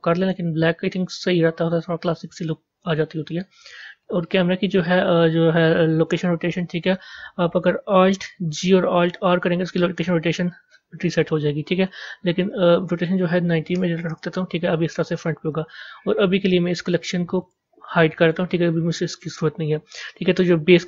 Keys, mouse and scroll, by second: 1.0-4.0 middle drag, 4.1 click, 6.0 click, 8.5 alt+g, 9.1 alt+r, 12.2-15.7 drag, 17.3 click, 18.1 click.